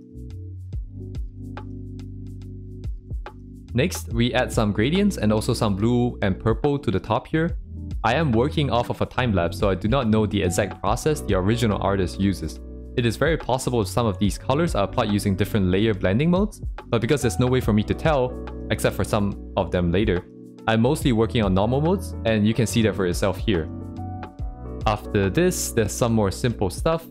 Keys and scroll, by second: 3.2 ctrl+z, 4.0 ctrl+z, 5.5 ctrl+z.